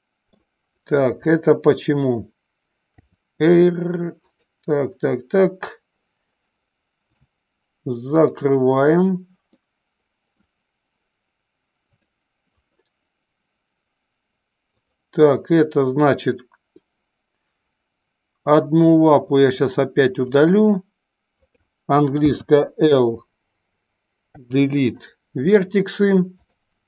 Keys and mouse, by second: 2.9 r, 4.2 click, 7.0-8.2 drag, 9.4-10.3 middle drag, 11.7 click, 14.7 click, 19.4-20.6 drag, 22.2 l, 24.2 Delete, 26.3 click.